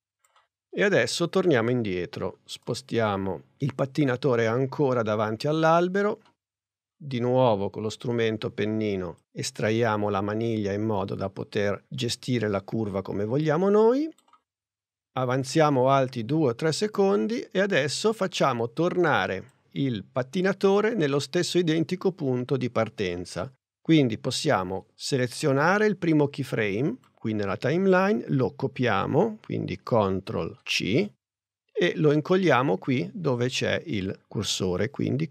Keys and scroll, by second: 30.2 super+c.